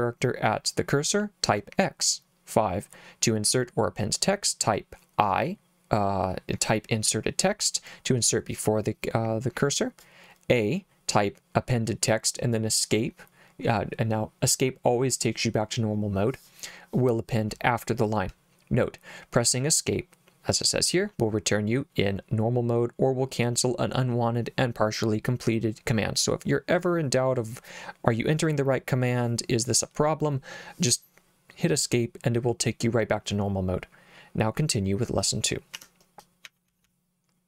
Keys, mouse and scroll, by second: 35.7 Escape, 36.4 j, 36.7 j, 36.8 j.